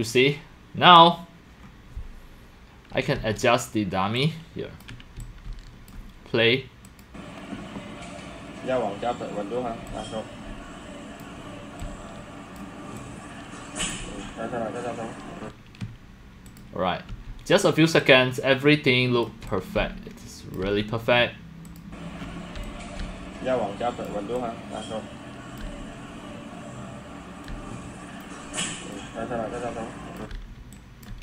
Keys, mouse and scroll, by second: 1.6 scroll, 3.0 scroll down 3, 3.2 w, 4.2 click, 5.0 click, 5.2 x, 5.5 c, 5.9 click, 6.9 click, 9.9-11.2 drag, 9.9 c, 10.5 c, 11.8 click, 11.8-13.9 c, 13.0 click, 14.1 click, 14.2 scroll, 14.7 scroll down 5, 16.5 click, 17.1 w, 18.0-19.4 drag, 19.4 x, 19.9-20.4 c, 20.5 click, 20.6 c, 21.8 click, 22.2 scroll, 22.3-25.4 typing, 22.7 click, 24.1 click, 25.6-27.5 drag, 27.5-30.6 typing, 31.0 click.